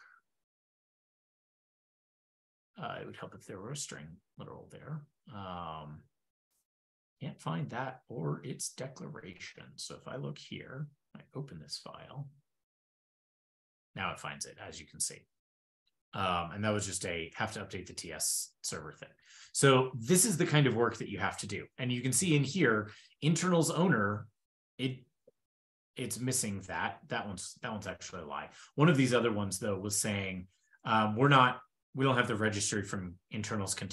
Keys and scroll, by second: 0.5 ctrl+d, 1.3 super+s, 4.2 super+s, 9.1 shift+super+\, 12.6 shift+super+[, 19.5 shift+super+], 28.2 super+w.